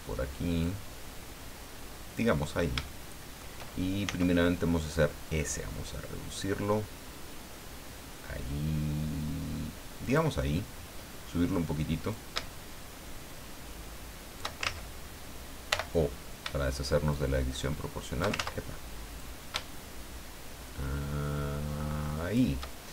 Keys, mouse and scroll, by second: 0.6-2.3 drag, 2.4-2.8 scroll up 1, 2.8 shift+middle click, 4.0 s, 10.0 click, 12.1-14.5 shift+drag, 14.6 ctrl+shift+z, 15.7 o, 17.1-18.4 shift+drag, 18.3 ctrl+shift+z, 19.2-22.5 drag.